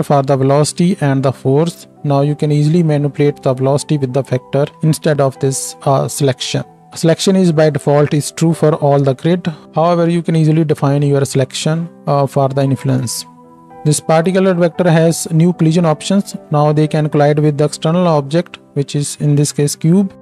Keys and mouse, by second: 18.0 space.